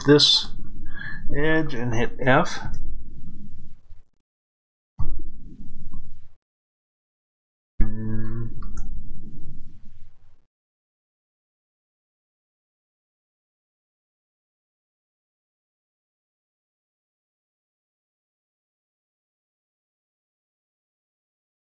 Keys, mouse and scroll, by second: 2.5 f, 9.7-19.6 middle drag, 9.9-10.5 scroll up 1, 19.6 click.